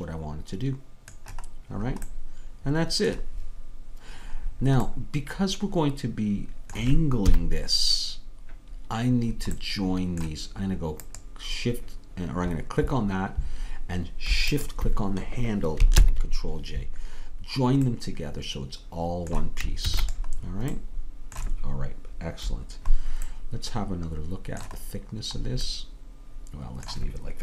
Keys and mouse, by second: 2.9-7.3 middle drag, 7.3 KP_3, 9.6 middle click, 16.0 ctrl+j, 19.9 ctrl+s.